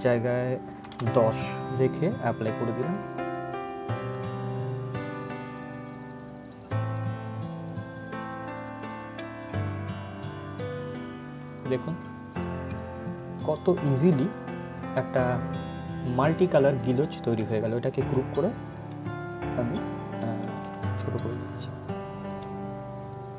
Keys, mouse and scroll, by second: 2.1-17.6 drag, 17.6 ctrl+g, 18.1-23.3 drag.